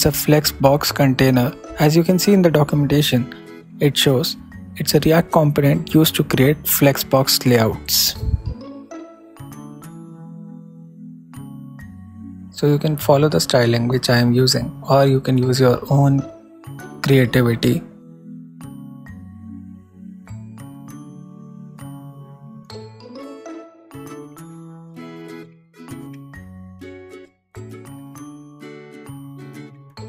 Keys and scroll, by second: 0.3 super+n, 0.9 super+s, 4.1 super+s, 10.7-12.1 typing, 13.6 super+v, 13.7 super+s, 14.1 super+Right, 16.5 shift+=, 16.7 shift+', 17.7 shift+c, 22.1 shift+Return, 22.3-23.6 typing.